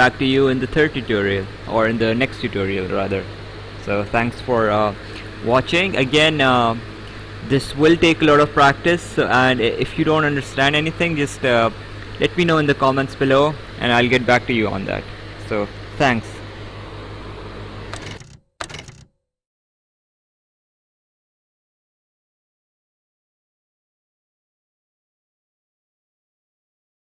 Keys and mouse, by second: 0.2 right click.